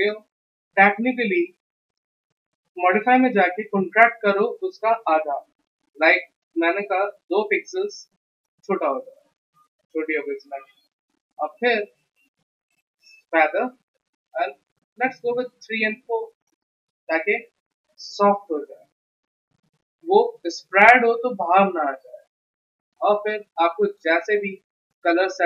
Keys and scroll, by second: 7.1 2, 15.5 4.